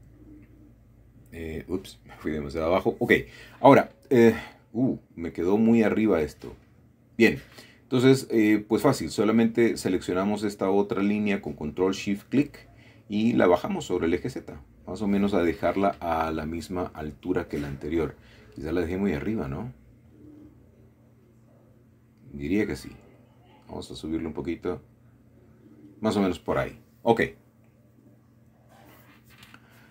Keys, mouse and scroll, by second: 0.3 middle click, 0.6 scroll down 1, 1.2-1.5 scroll down 1, 1.5-3.2 middle drag, 4.0 middle click, 4.4-4.8 scroll up 1, 4.8-5.2 scroll down 1, 5.2-6.4 shift+middle drag, 6.8-7.5 scroll up 1, 7.5 shift+middle click, 8.8 alt+shift+click, 9.8 scroll down 1, 10.6-11.7 shift+middle drag, 12.1 typing, 16.3 click, 16.9 Tab, 17.3-17.7 scroll down 1, 17.7-20.2 middle drag, 21.7 Tab, 22.6 g, 23.2 z, 24.7 shift+click, 25.2 Tab, 25.2 typing, 25.4-26.5 middle drag, 27.3 middle click, 27.5-28.2 typing.